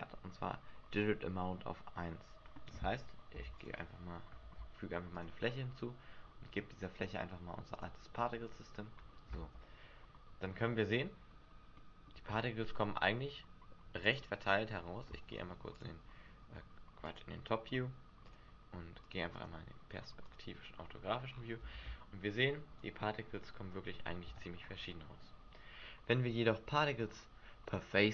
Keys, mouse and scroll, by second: 3.3 Delete, 4.4 shift+a, 6.9 click, 7.7 click, 9.3 alt+a, 10.4 middle click, 11.0-11.3 scroll up 4, 11.7 middle click, 12.2 Escape, 17.0 click, 18.3 click, 19.0 click, 19.3 click, 20.8-21.3 scroll down 5, 21.3-21.6 scroll up 6, 21.6 alt+a, 24.2 alt+a.